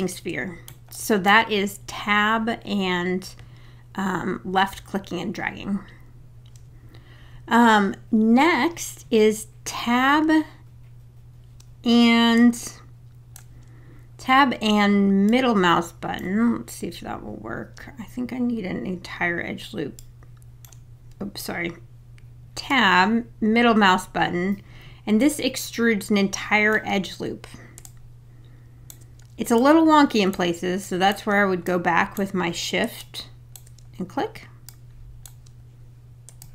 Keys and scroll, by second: 21.4 Tab.